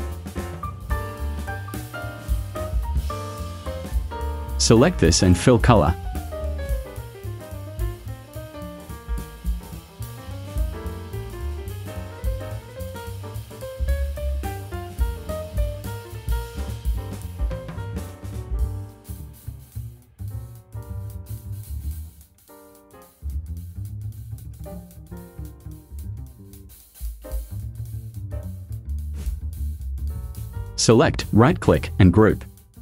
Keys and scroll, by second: 1.2 v.